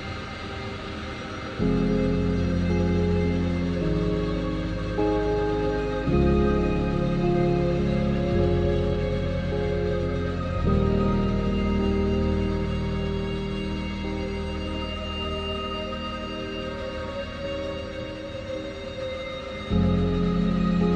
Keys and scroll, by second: 9.0 ctrl+t.